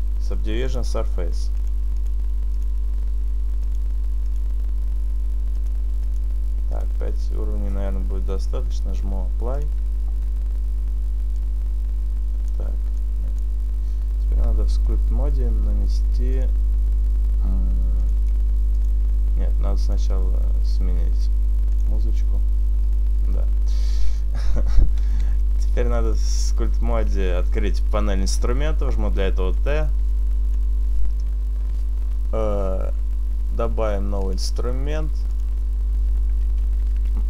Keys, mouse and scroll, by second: 1.6 click, 2.0 click, 2.6 click, 3.5 click, 5.4 click, 6.2 click, 6.8 click, 9.6 click, 11.5 click, 13.1 click, 16.4 click, 18.1 click, 25.9 shift+middle click, 30.0 click, 30.0 t, 34.8 click, 35.7 click.